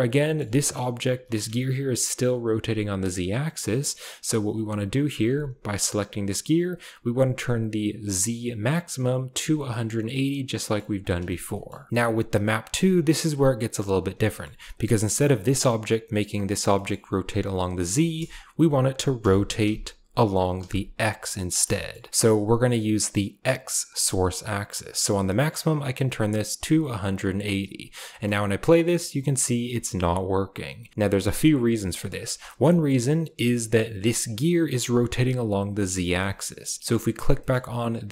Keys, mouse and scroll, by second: 0.1 shift+middle drag, 0.5 click, 1.0 r, 3.5 drag, 5.2 g, 9.0 click, 10.5 shift+middle click, 11.4 middle click, 14.2 shift+click, 14.2 shift+middle click, 15.4 click, 16.8 shift+click, 18.0 shift+drag, 19.1 r, 21.8 shift+middle drag, 25.7-27.5 drag, 28.0 space, 28.4 click, 28.9 click, 29.6 shift+middle click, 30.8 shift+middle click, 31.2 shift+middle click, 32.0 middle click, 32.2 space, 32.7 shift+middle drag, 33.6 shift+middle click, 34.0 click, 36.3-36.6 shift+drag, 37.3 shift+drag.